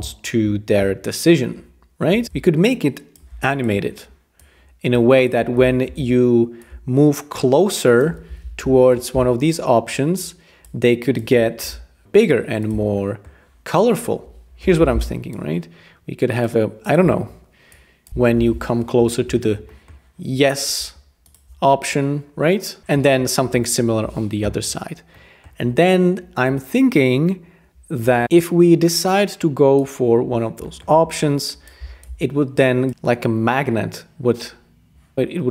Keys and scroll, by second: 5.9 super+g, 8.6 alt+super+], 11.6 k, 14.6 r, 18.3 alt+super+], 22.8 alt+super+].